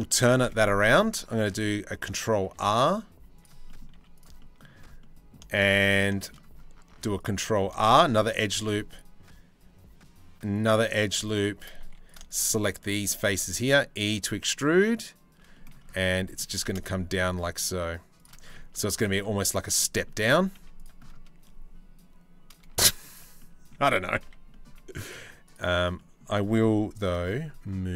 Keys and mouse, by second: 0.8 ctrl+r, 3.6 z, 4.6 middle click, 5.1 shift+middle click, 5.8 shift+click, 6.5 ctrl+r, 7.7 shift+click, 8.3 ctrl+r, 10.4 2, 11.0 shift+click, 11.5 3, 11.9 shift+middle click, 12.9 e, 15.1 click, 15.8 middle click, 16.1 g, 18.3 Tab, 18.4 click, 18.8 Tab, 19.4 click, 19.9 2, 20.2 z, 20.4 click, 22.3 z, 23.8 a, 24.1 click, 24.7 alt+click, 25.6 click.